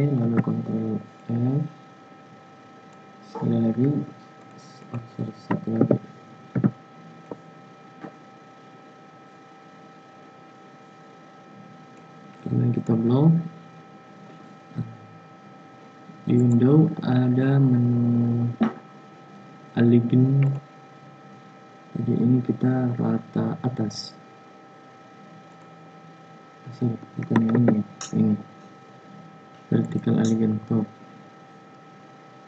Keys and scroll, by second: 0.1 ctrl+f, 5.7 ctrl+c, 6.4 ctrl+f, 27.4 ctrl+z.